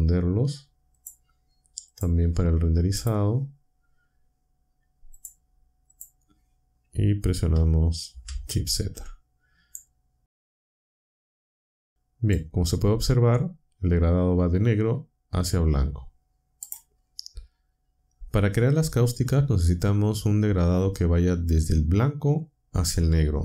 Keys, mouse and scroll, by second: 0.9 click, 1.9 click, 3.0 click, 5.1 click, 5.9 click, 8.2 shift+z, 9.7-12.5 drag, 16.6 click.